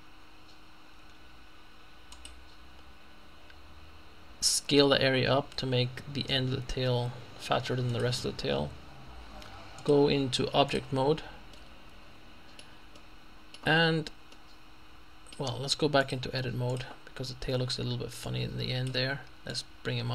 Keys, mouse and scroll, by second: 2.1 click, 5.1 s, 7.9 click, 9.8 click, 10.7 click, 11.6 middle click, 14.2-14.9 scroll down 2, 16.1 click, 17.3-18.0 scroll up 1, 18.0 scroll up 1, 18.3 click, 19.5-20.1 drag.